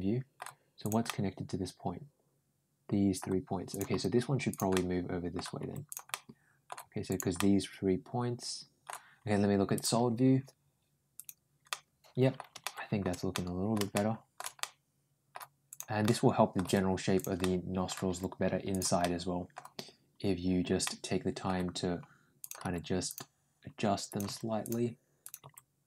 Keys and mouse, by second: 0.6 click, 0.9-3.0 middle drag, 3.5 click, 3.7 g, 4.6 middle click, 5.4 g, 5.9 middle click, 6.9 click, 7.2-8.7 middle drag, 9.6 click, 11.0 click, 11.5 middle click, 12.4 shift+middle click, 13.1 middle click, 13.7 shift+middle click, 14.4 middle click, 15.5 click, 15.8 middle click, 16.6 g, 17.2 middle click, 17.9 g, 18.8 middle click, 20.6 middle click, 22.2 click, 22.5 g, 23.9 click, 24.1 g, 25.1 click, 25.2 g.